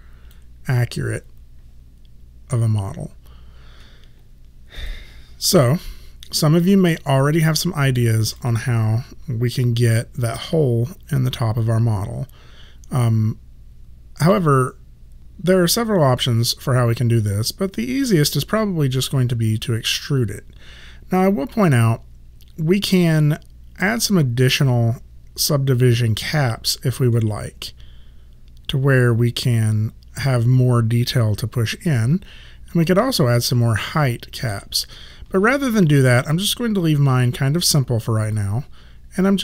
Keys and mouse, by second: 4.8 click, 5.8 alt+right click, 7.6 alt+middle click, 8.4 click, 23.8 click, 26.3 click, 27.2 middle click, 32.8 click, 33.6 middle click, 35.6 ctrl+z, 38.4 right click.